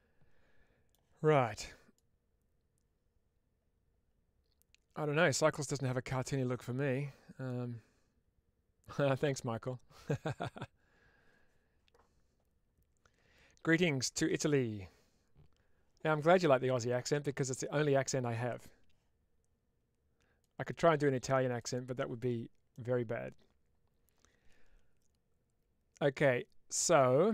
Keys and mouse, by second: 22.6-27.3 middle drag.